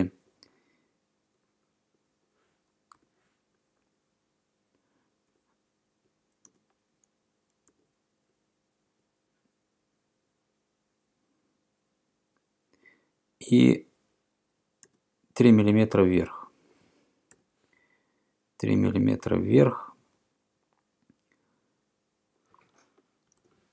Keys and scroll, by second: 3.0 Return, 6.5 e, 7.7 2, 15.0 e, 17.4 3, 23.3 BackSpace.